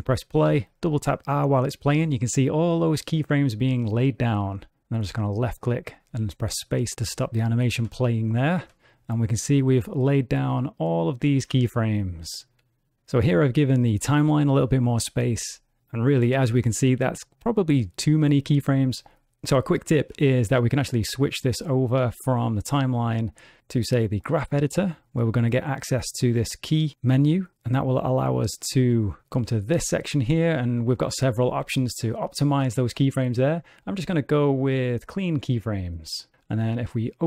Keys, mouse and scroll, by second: 0.5 r, 6.1 space, 6.9 click, 8.2 space, 13.2 space, 21.0 click, 23.2 click, 26.3 click.